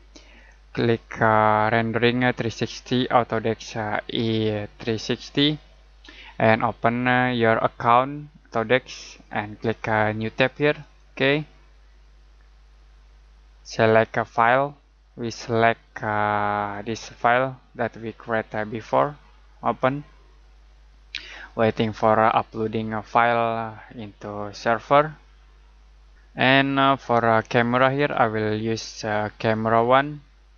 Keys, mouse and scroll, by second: 10.8 click, 14.3 click, 27.7 click.